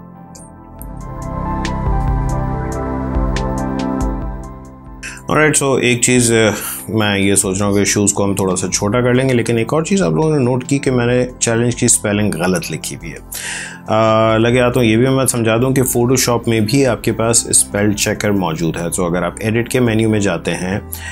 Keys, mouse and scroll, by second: 1.0 Up, 2.8 Right, 7.4 click, 10.1 t, 17.6 click.